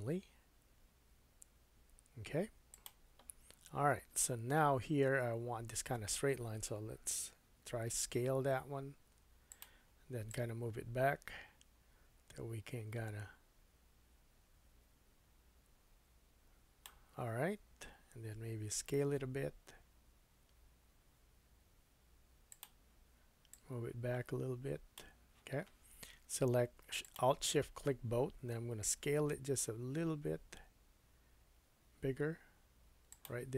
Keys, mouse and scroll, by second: 2.8-4.8 middle drag, 7.5 s, 10.3-22.6 drag, 18.5 s, 22.6 middle click, 23.5-27.2 drag, 29.0 s, 33.0-33.5 middle drag.